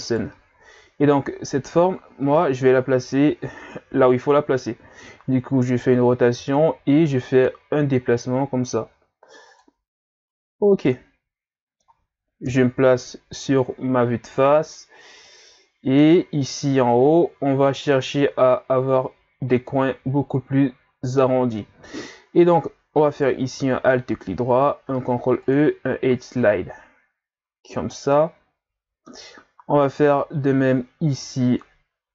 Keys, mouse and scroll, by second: 0.0 right click, 1.7 ctrl+scroll down 2, 2.2 Tab, 2.7 a, 2.9 a, 3.9 r, 5.0-6.3 drag, 6.4 g, 10.6 scroll down 2, 10.9-12.4 middle drag, 12.4 KP_1, 15.3 middle click, 16.2-16.9 scroll up 3, 17.0 ctrl+scroll up 2, 18.6-19.6 scroll up 1, 23.1 alt+right click, 24.8 ctrl+e, 28.1-32.1 middle drag.